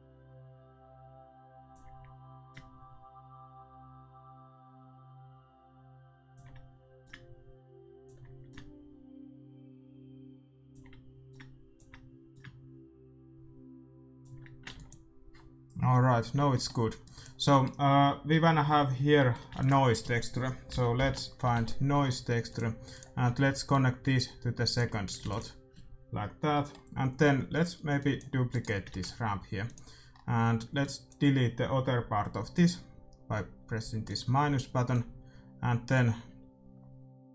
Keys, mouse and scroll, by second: 2.4-4.5 drag, 7.0-10.2 drag, 11.3-14.2 drag, 14.8 ctrl+s, 17.0-18.7 drag, 17.8-20.8 middle drag, 19.5 shift+a, 23.6-25.5 drag, 25.3 ctrl+s, 26.5-29.8 middle drag, 27.9-32.6 drag, 28.4-30.4 right drag, 28.8 shift+d, 30.2 middle click, 34.0-36.7 drag.